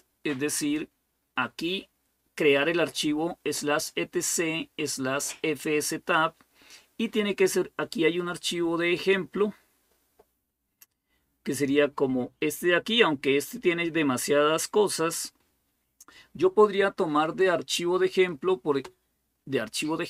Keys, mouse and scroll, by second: 7.9-8.7 scroll down 1, 10.2-11.3 scroll up 1, 11.3-11.8 scroll down 1.